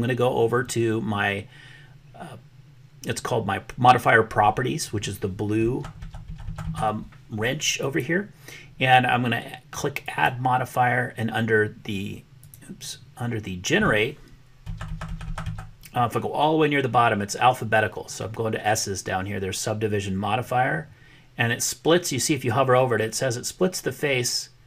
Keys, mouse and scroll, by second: 10.0-11.3 drag, 12.3-24.6 drag.